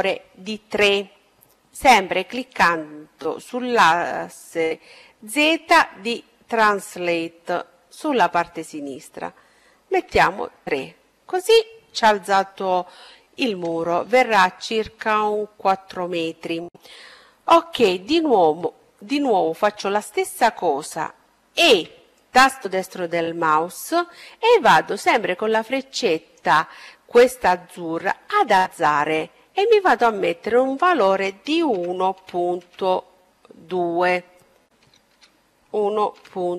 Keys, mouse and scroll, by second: 6.1-8.0 drag, 19.4 e, 21.6-23.7 drag, 27.8-29.6 drag, 32.9 BackSpace.